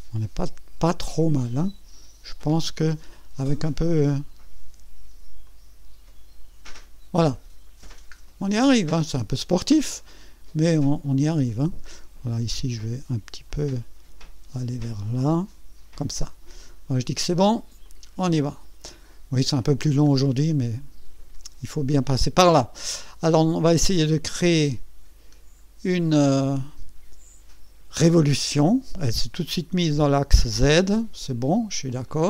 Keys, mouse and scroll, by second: 0.8-2.8 drag, 3.0 scroll down 1, 3.4 right click, 5.4-7.1 drag, 7.3 scroll up 1, 7.9 scroll down 1, 8.4-10.3 right drag, 10.8 scroll up 2, 11.5 right click, 12.1 scroll up 2, 13.5-16.0 drag, 16.2-16.8 scroll down 4, 17.8 click, 18.5-18.9 scroll down 2, 19.4-20.0 scroll down 4, 20.5-21.3 right drag, 20.9-23.8 middle drag, 23.8 click, 25.2-25.7 scroll down 1, 25.7 scroll up 1, 25.9 right click, 32.0 click.